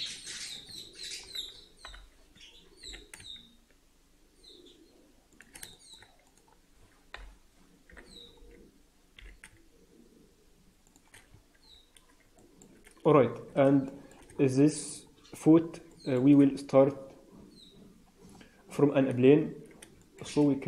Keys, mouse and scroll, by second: 0.1 click, 0.9 shift+click, 1.8 ctrl+l, 2.7 g, 5.6 shift+middle click, 6.1 click, 7.8 ctrl+l, 9.1 g, 11.2-12.1 scroll down 9, 11.5 Tab, 12.3 shift+middle click, 13.0-13.6 scroll up 3, 13.6 scroll up 2, 13.8 shift+middle click, 14.2 Tab, 14.4 scroll up 1, 15.6 scroll down 2, 15.8 shift+middle click, 18.2 scroll up 3, 19.9 shift+middle click, 20.2-20.6 scroll up 3.